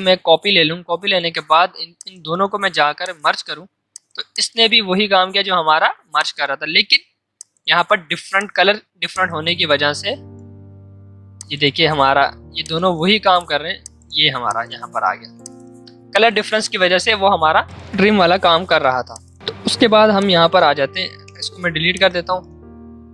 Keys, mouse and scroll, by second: 14.8 ctrl+z, 17.3 ctrl+z, 17.6 click, 17.7 ctrl+z, 18.6 ctrl+z, 19.0 click, 19.4 space, 19.8 v, 22.2-23.0 typing.